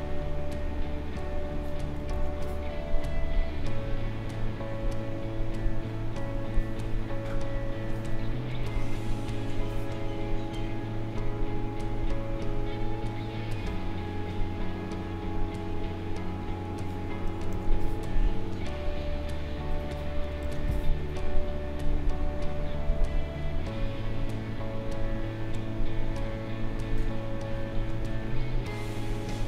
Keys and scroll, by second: 2.1 ctrl+z, 8.6 space, 17.5 ctrl+z, 20.4 ctrl+z.